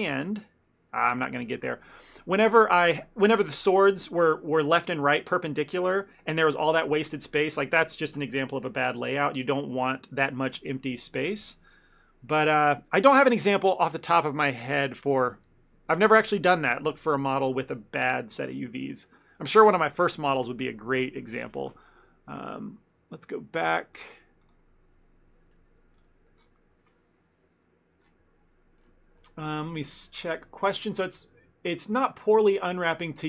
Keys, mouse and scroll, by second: 1.0 ctrl+z, 11.7 click.